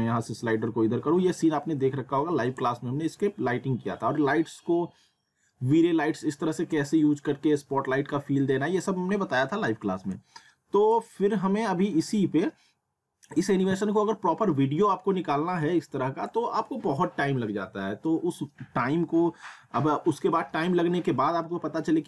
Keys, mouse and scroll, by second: 10.1-18.6 drag.